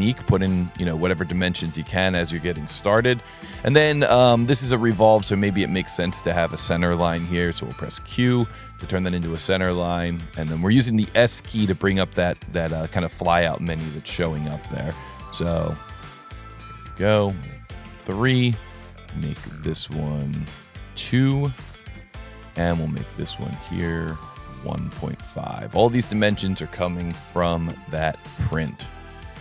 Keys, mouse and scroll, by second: 0.1 click, 0.9 click, 2.2 click, 4.2 s, 5.1 click, 6.5 click, 8.2 click, 8.8 s, 10.0 click, 12.0 click, 12.8 click, 13.4 click, 15.6 click, 16.5 click, 17.2 click, 19.4 click, 20.5 click, 21.0 click, 24.1 click, 25.8 click, 26.4 click.